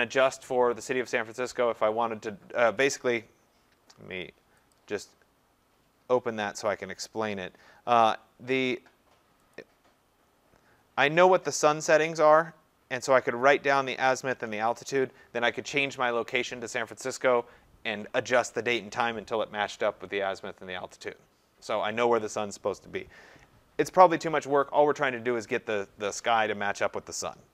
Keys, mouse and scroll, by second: 4.7-6.6 drag, 9.5 click.